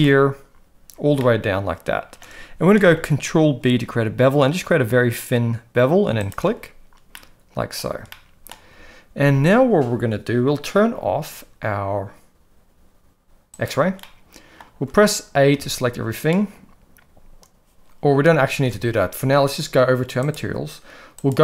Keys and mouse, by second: 1.2 shift+middle click, 2.9 ctrl+b, 7.2 middle click, 8.1 shift+middle click, 13.5 click, 14.0 middle click, 15.5 a, 18.6 alt+a, 20.3 drag, 21.1-21.4 drag.